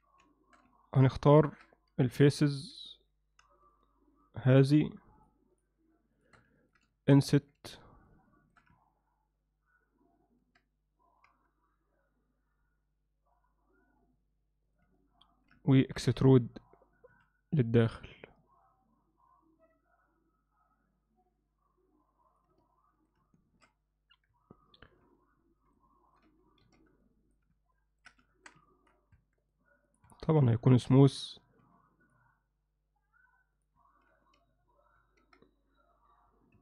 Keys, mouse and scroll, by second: 0.3 alt+shift+middle click, 0.8 ctrl+alt+middle click, 1.2 ctrl+alt+middle click, 2.5 click, 2.6 3, 3.0 click, 3.7 shift+click, 4.2 shift+click, 6.2 shift+click, 6.6 ctrl+middle click, 6.9 alt+shift+middle click, 7.4 ctrl+middle click, 7.7 middle click, 8.3 alt+shift+middle click, 15.0-15.5 middle drag, 15.7 ctrl+middle click, 17.1 e, 22.7 middle click, 23.3-23.7 alt+shift+middle drag, 24.4 KP_Divide, 25.3 middle click, 26.0 ctrl+alt+middle click, 26.6 shift+b, 27.8 ctrl+middle click, 28.3 shift+middle click, 28.7 ctrl+middle click, 29.2 Tab, 29.7 right click, 30.1 Tab, 30.5 ctrl+alt+middle click, 31.4 ctrl+r, 35.0 ctrl+r.